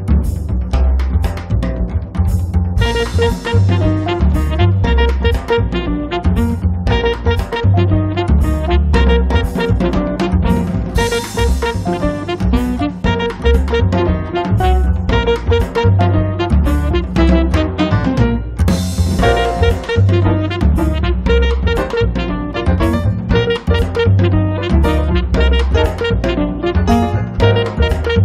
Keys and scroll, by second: 12.8 space, 17.2 space, 19.1 space, 27.1 1, 27.5 0.